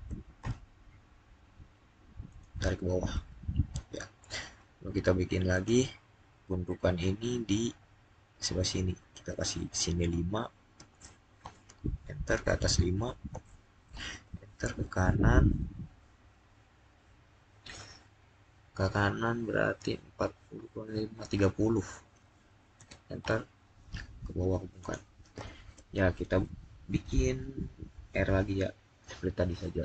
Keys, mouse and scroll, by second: 0.3 Return, 2.1 click, 5.4 click, 10.7 click, 11.3 Return, 13.0 typing, 13.7 Return, 21.8 Return, 22.4-23.1 typing, 24.7 click.